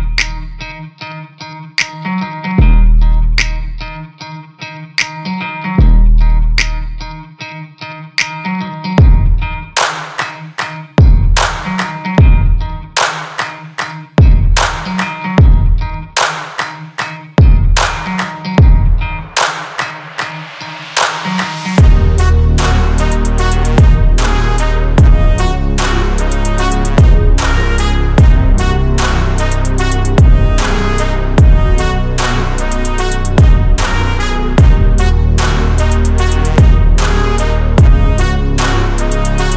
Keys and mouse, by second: 0.3 shift+middle click, 1.3 shift+middle click, 2.9 shift+middle drag, 5.2 shift+middle drag, 5.8-6.3 ctrl+middle drag, 7.9-9.9 middle drag, 10.3-10.7 shift+middle drag, 11.1-14.5 middle drag, 15.3-16.0 middle drag, 16.7 middle click, 22.3-23.8 drag, 24.9-25.6 drag, 26.4-27.1 middle drag, 28.3 shift+middle drag, 28.6-29.9 middle drag, 30.1 shift+middle click, 30.6 click, 31.0 shift+a, 32.7 click, 33.4 h, 33.8 drag, 34.3 shift+a, 35.8 h, 36.3-36.7 drag, 38.3-38.7 shift+drag.